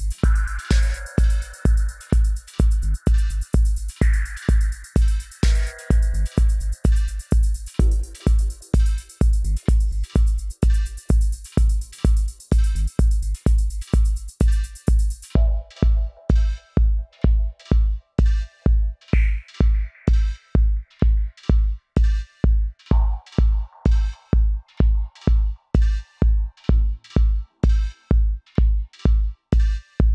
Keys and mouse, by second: 3.6-8.4 middle drag, 5.6 Tab, 10.5 Tab, 11.4-13.7 middle drag, 13.9-15.7 middle drag, 17.2 alt+w, 20.9 f, 21.4-23.3 drag, 23.1-25.4 middle drag, 26.7 alt+w.